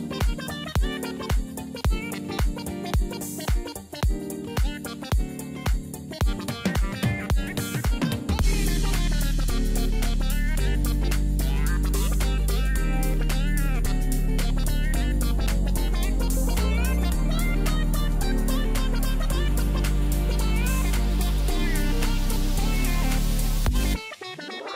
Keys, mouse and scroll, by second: 9.1 ctrl+t, 10.1 alt+click.